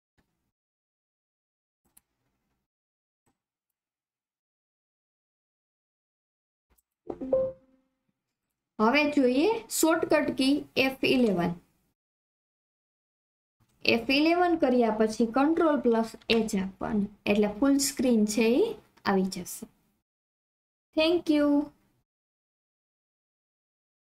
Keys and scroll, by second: 0.0 alt+F4.